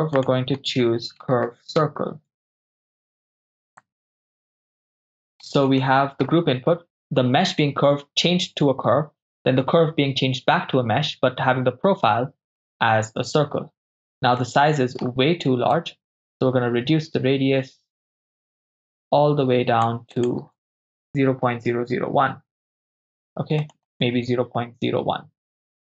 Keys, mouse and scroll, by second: 3.8-4.9 drag, 4.9 ctrl+middle click, 5.8 shift+middle click, 14.4 middle click, 15.8-19.9 drag, 20.1-22.2 drag, 21.7 0, 23.6-25.8 drag.